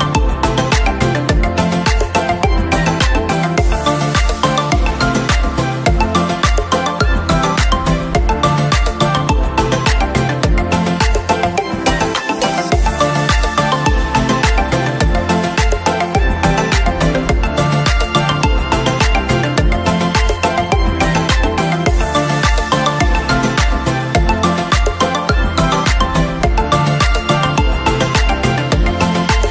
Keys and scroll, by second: 9.8 ctrl+=, 15.9 ctrl+v, 16.8 b, 18.2 Delete, 19.1 ctrl+=, 21.8 ctrl+c.